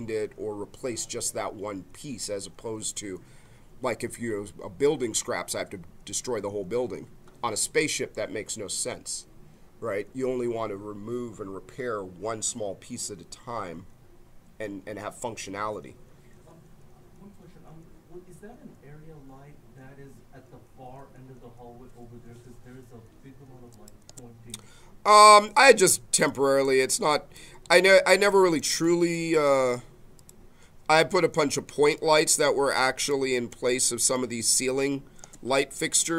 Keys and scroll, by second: 24.0 space, 35.4 space.